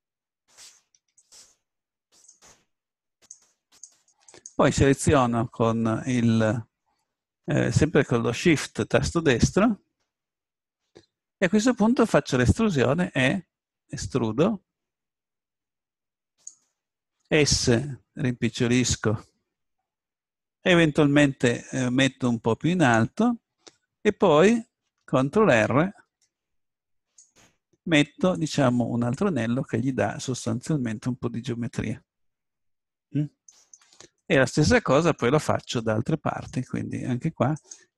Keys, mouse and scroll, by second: 0.4-6.2 right drag, 6.2 click, 6.9-10.9 middle drag, 12.6 middle click, 12.7 click, 13.1 e, 18.1 click, 18.1 s, 18.9-21.3 drag, 22.2-24.5 drag, 24.5 a, 26.2 ctrl+r, 29.1-30.8 drag, 30.8-32.9 middle drag, 34.9 middle click, 37.6-37.9 right drag.